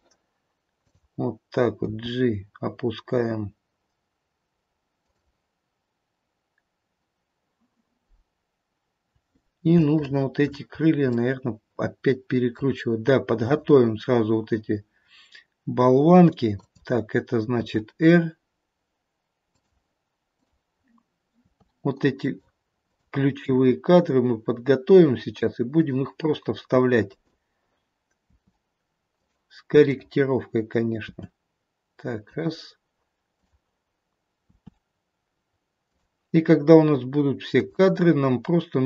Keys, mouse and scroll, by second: 0.7 click, 1.8 g, 9.7 shift+middle click, 10.4 shift+middle click, 10.9 scroll up 1, 11.1 middle click, 13.4 click, 16.6 click, 17.5 r, 20.2 click, 21.4 r, 22.7 click, 23.6 r, 26.9 click, 28.2 r, 29.8 click, 31.1 r, 33.4 click, 34.6 r, 37.5 click.